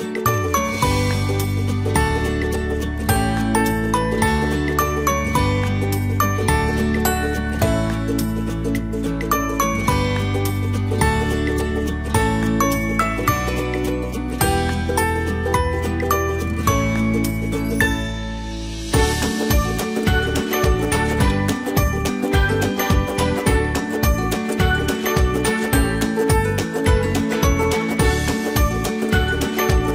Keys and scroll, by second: 10.7 alt+Tab, 12.2 ctrl+z, 23.7 ctrl+c, 24.2 ctrl+shift+v, 25.7 alt+Tab.